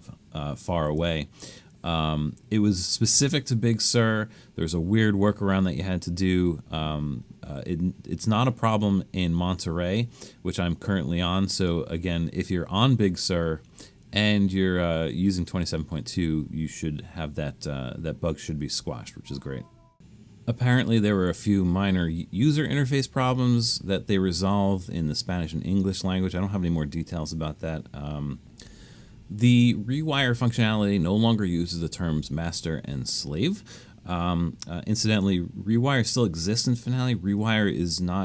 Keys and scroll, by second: 0.9 super+z.